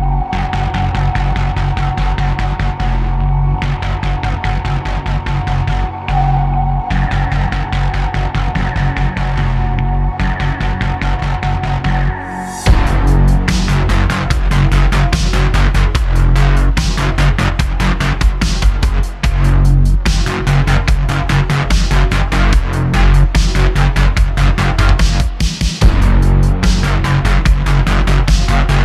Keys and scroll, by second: 0.9 s, 5.6 Tab, 6.0 3, 6.5 i, 8.2 e, 12.5 e, 13.4 s, 14.6 e, 16.4 i, 17.8 e, 19.2 shift+Tab, 19.8 q, 23.3 super+z, 24.3 Tab, 24.7 q, 26.3 `.